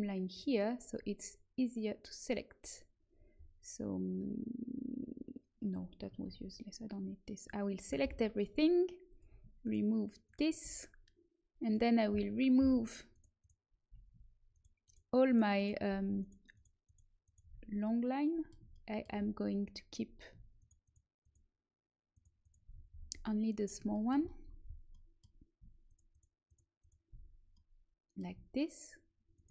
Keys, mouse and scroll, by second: 0.9-2.3 drag, 6.2 ctrl+z, 8.0 l, 9.0-11.0 drag, 9.5-12.0 right drag, 11.6-13.6 drag, 13.0 right click, 17.5-18.6 middle drag, 18.6 click, 18.8 middle click, 19.4 middle click, 20.5-22.6 middle drag, 22.6 click, 22.7 middle click, 22.8 right click, 24.0-25.8 middle drag, 26.0 middle click, 26.0-27.1 right drag, 27.5-29.1 middle drag, 27.5 right click, 29.3 middle click, 29.3 right click.